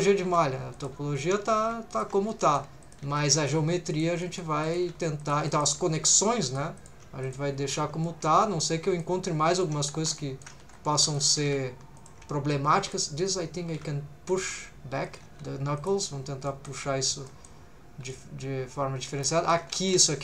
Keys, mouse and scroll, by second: 0.3 r, 0.7 click, 1.6 g, 1.9 shift+click, 2.3 middle click, 2.8 click, 3.0 g, 3.4 shift+click, 3.9 click, 4.2 middle click, 4.6 click, 4.9 shift+g, 5.2 shift+click, 5.5 middle click, 6.0 2, 6.1 click, 6.5 click, 6.8 shift+click, 7.2 click, 7.5-7.9 scroll down 2, 8.0 shift+middle click, 8.4 middle click, 9.2 middle click, 10.0 3, 10.2 middle click, 10.7 2, 10.9 3, 11.0 click, 11.5 g, 12.0 shift+click, 12.8 click, 13.3 click, 13.7 g, 14.3 shift+click, 15.0 click, 15.4 g, 15.8 shift+click, 15.9 click, 16.0 scroll down 1, 16.5 middle click, 16.9 scroll up 1, 17.3 middle click, 18.1-19.5 middle drag, 19.8 shift+middle click.